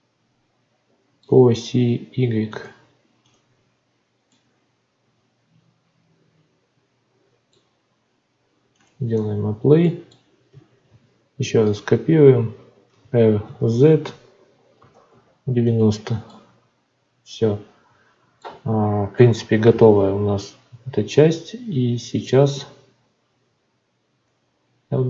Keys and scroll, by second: 10.8 shift+d.